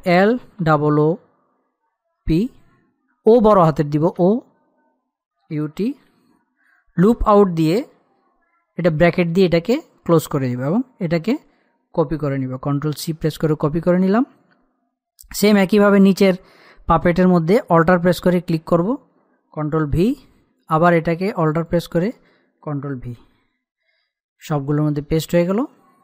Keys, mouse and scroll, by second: 0.7-1.3 typing, 2.7-3.5 typing, 4.8-6.5 typing, 8.3-9.3 typing, 11.2-13.3 drag, 13.3 ctrl+c, 15.6 scroll down 1, 18.1 alt+Num_Lock, 18.1-18.8 scroll down 1, 18.8 alt+click, 20.6 ctrl+v, 22.2 alt+click, 24.0 ctrl+v, 24.9-25.8 scroll up 1, 25.8 click.